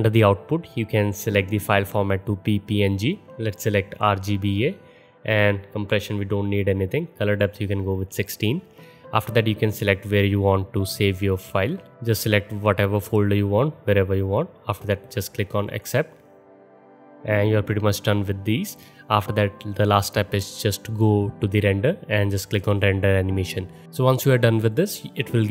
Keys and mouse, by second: 7.3-9.7 drag, 9.7-23.8 middle drag, 23.8-25.5 drag.